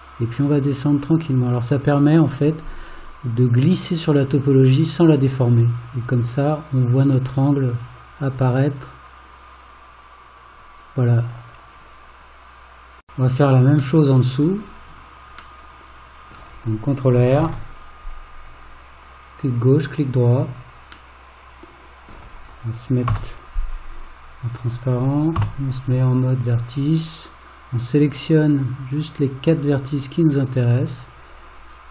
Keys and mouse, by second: 14.0 middle click, 15.6 middle click, 17.5 ctrl+r, 21.1-22.1 middle drag, 23.1 alt+z, 25.4 1, 28.9 click.